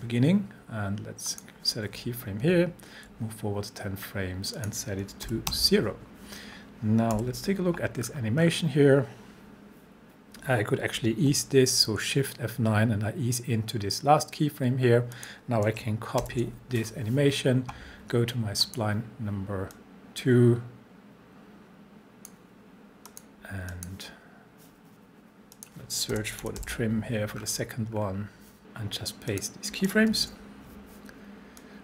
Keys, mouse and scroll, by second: 1.3 click, 2.4 shift+Page_Down, 4.6 click, 5.3 0, 7.1 u, 8.0-10.3 scroll down 1, 11.0-11.3 shift+scroll down 1, 11.3 shift+F9, 15.1 click, 16.2 ctrl+c, 18.6-22.5 drag, 20.1-22.5 drag, 25.9-27.1 typing, 27.4 scroll down 1, 29.3 click, 30.1 ctrl+v, 31.6-31.8 drag.